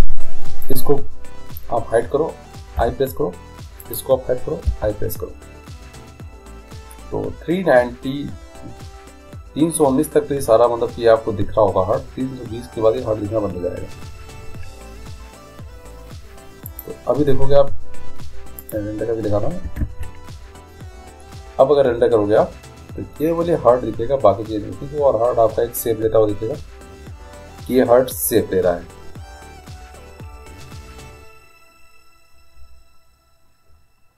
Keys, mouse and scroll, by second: 1.1-2.8 drag, 3.1 i, 4.1-5.6 drag, 5.0 i, 17.0-18.8 drag, 19.9 alt+a, 19.9 click.